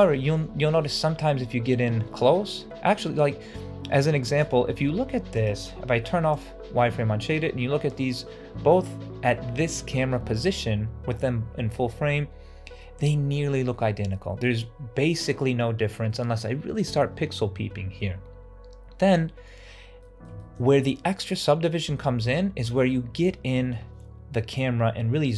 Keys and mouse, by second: 0.0 shift+middle drag, 0.8-2.2 ctrl+middle drag, 2.4 middle click, 2.9 shift+middle drag, 3.3 middle click, 4.0 shift+middle drag, 5.2 click, 5.9 ctrl+alt+z, 6.3 click, 7.1 middle click, 19.9 middle drag, 20.3 shift+middle drag, 22.1-23.0 shift+middle drag.